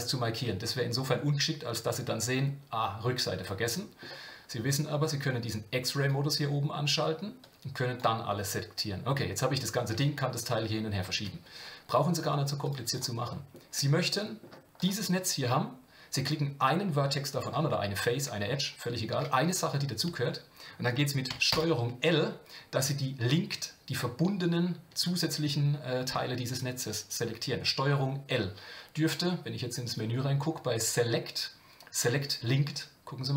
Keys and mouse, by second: 1.1-4.0 middle drag, 6.0 click, 7.4 click, 8.3-9.9 middle drag, 13.2 middle click, 14.1 middle click, 14.8-21.3 drag, 21.5 ctrl+l, 29.9-33.3 drag.